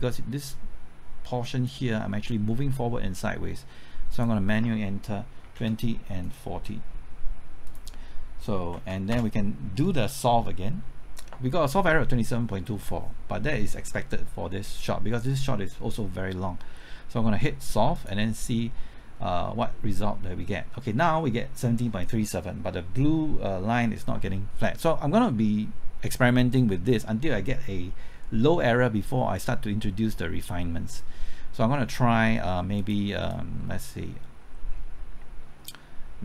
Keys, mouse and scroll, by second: 2.0-2.4 scroll up 1, 2.4 scroll down 1, 2.7 middle click, 4.1 click, 5.4 KP_2, 5.6 KP_0, 6.2-7.3 drag, 8.6 KP_4, 8.8 KP_0, 9.1 KP_Enter, 13.1 Return, 17.9-36.2 drag, 35.0 KP_Enter.